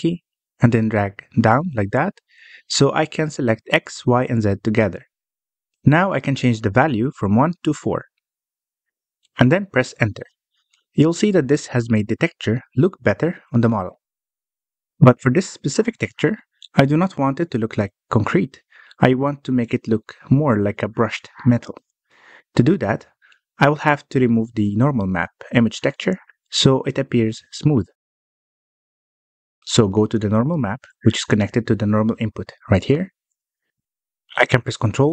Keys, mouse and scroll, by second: 12.1 Tab, 13.3-16.4 middle drag, 17.3-18.9 scroll down 12, 18.9-20.1 scroll down 1, 20.1-20.6 scroll down 2, 20.6-23.8 middle drag, 23.8-24.2 scroll up 4, 24.2-26.0 middle drag, 26.0-26.6 scroll up 5, 26.6-29.7 middle drag, 32.8-34.3 middle drag, 34.3 scroll up 4, 34.7-35.1 middle drag.